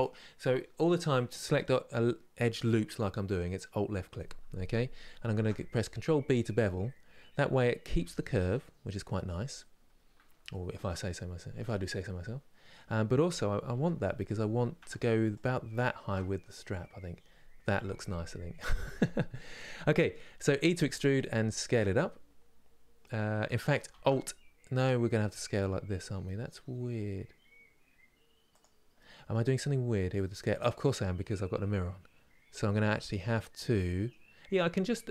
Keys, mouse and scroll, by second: 5.0 ctrl+b, 9.1-9.6 scroll down 2, 10.2-13.4 shift+middle drag, 13.4 3, 13.9 alt+click, 16.0 scroll down 1, 19.0-20.3 middle drag, 20.3 e, 28.6 middle click, 29.2-29.5 scroll up 2, 29.9-35.1 middle drag.